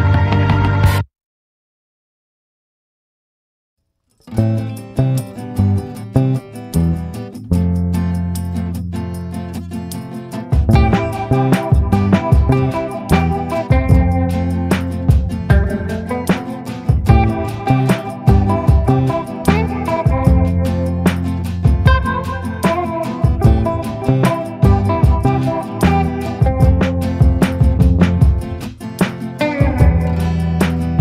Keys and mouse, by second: 1.2 b, 2.0 b, 5.2 click, 6.3 click, 7.0 ctrl+z, 7.4-8.0 ], 8.0-9.8 drag, 10.1 right click, 11.3 ctrl+z, 11.5-12.6 drag, 12.8 click, 13.7 right click, 14.6 a, 17.0-19.1 typing, 17.7 click, 18.2 ctrl+z, 18.7 click, 19.3 click, 20.1 ctrl+z, 20.2 ctrl+z, 20.9 ctrl+z, 20.9 ], 21.1 ], 21.3 ], 21.4 [, 21.6-23.1 drag, 23.7 ctrl+z, 24.6 ctrl+z, 26.0 [, 26.2 [, 29.4 click.